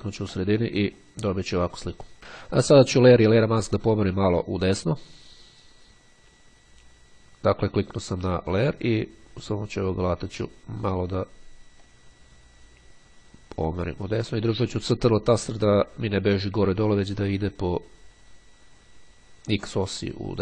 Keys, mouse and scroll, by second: 8.4 click, 9.7 click, 10.8-20.4 drag.